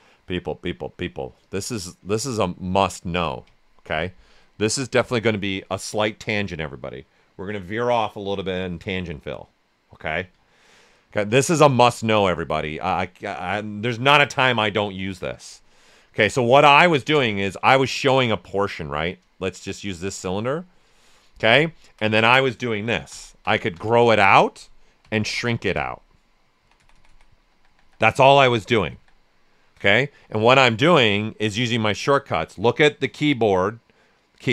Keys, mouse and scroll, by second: 1.4-3.0 drag, 3.5 ctrl+right click, 3.9 right click, 12.3 click, 15.8 click, 15.9 alt+right click, 16.9 ctrl+shift+click, 17.5 ctrl+shift+space, 20.3-21.7 right drag, 22.1 alt+right click, 23.0 ctrl+shift+x, 30.6 click.